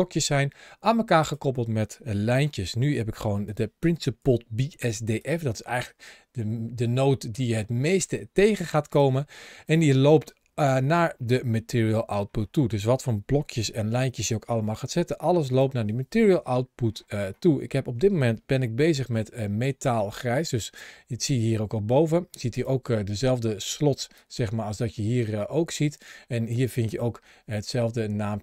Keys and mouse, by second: 2.3 shift+middle click, 3.3 click, 4.0 g, 8.2 g, 9.5 click, 9.7 g, 13.3 ctrl+shift+a, 18.5-19.0 drag, 19.3 click, 19.6 shift+click, 22.4-23.2 drag, 23.9 ctrl+shift+a.